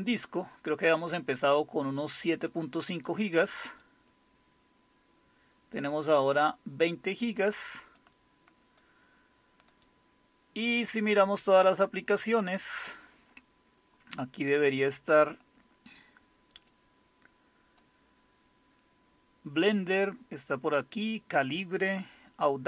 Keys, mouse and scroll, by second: 2.0-3.1 drag, 3.7 click, 4.1-7.5 drag, 7.9 click, 9.7 click, 12.1 click, 16.6 click.